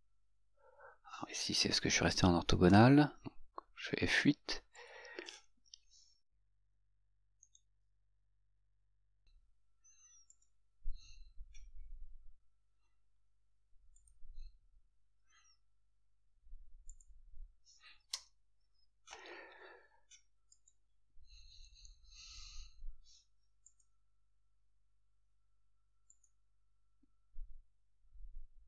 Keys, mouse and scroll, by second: 2.8 F8, 4.9 click, 6.7 Escape, 7.7 right click, 10.5 click, 14.2 click, 20.7 click, 23.9 click, 26.3 click.